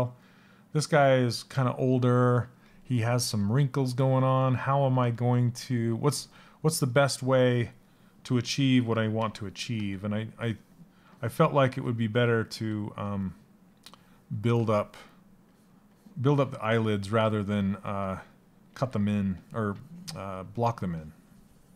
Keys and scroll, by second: 9.2 s.